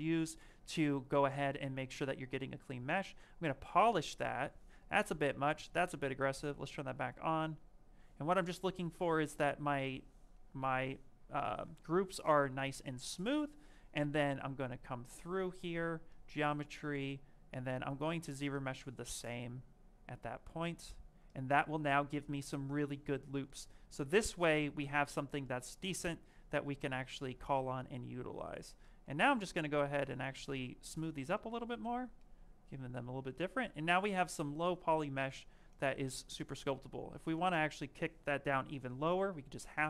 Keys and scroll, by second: 11.3 ctrl+z, 24.5 z, 24.8 s.